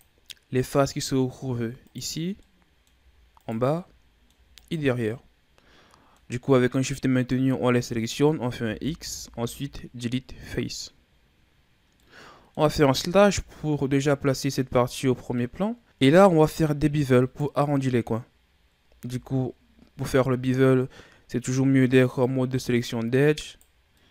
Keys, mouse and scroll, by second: 0.9 middle click, 1.9 right click, 2.4 middle click, 3.4 shift+right click, 3.7 scroll down 1, 3.8 middle click, 4.5 shift+right click, 5.1-6.6 middle drag, 6.6 scroll up 2, 8.6 x, 11.3-12.0 scroll down 1, 12.0-13.3 middle drag, 13.3 KP_Divide, 15.0-15.3 scroll down 1, 15.3 middle click, 16.6-17.2 scroll down 1, 17.2 right click, 19.0 ctrl+Tab, 23.3 right click, 23.9-24.1 middle drag.